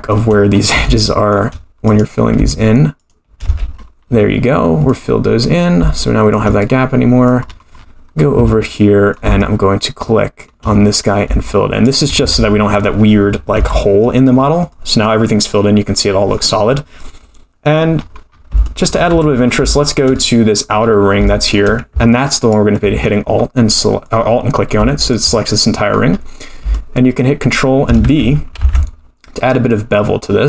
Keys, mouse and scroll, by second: 0.5-0.9 scroll up 4, 0.9 shift+middle click, 1.8 click, 3.0 shift+click, 3.4 f, 3.7-4.9 scroll down 14, 4.9 middle click, 6.0 shift+middle click, 6.6 middle click, 7.5-8.4 scroll up 16, 8.7 middle click, 9.4-10.6 shift+middle drag, 10.9 click, 11.8 shift+click, 12.2 f, 12.5-13.5 scroll down 6, 13.5 Tab, 14.0 middle click, 14.3-14.8 scroll down 4, 14.8-16.6 middle drag, 16.6-17.1 scroll down 2, 17.0-17.9 middle drag, 17.9-18.3 scroll down 1, 18.3-18.6 scroll up 10, 18.6 shift+middle drag, 19.1 Tab, 19.3 scroll down 2, 19.7 shift+middle click, 20.1 middle click, 21.0 scroll up 3, 21.2 shift+middle click, 22.4 alt+click, 23.1-23.6 scroll down 4, 23.7 middle click, 24.8 shift+middle click, 25.2-25.8 scroll down 3, 25.8-26.1 scroll down 1, 26.7-27.9 shift+middle drag, 28.6 ctrl+b.